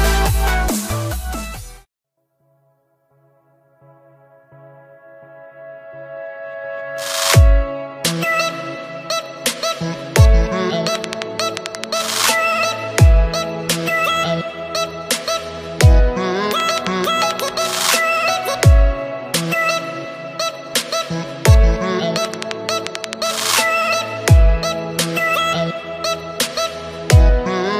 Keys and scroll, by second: 9.0 ctrl+z, 18.5 ctrl+space.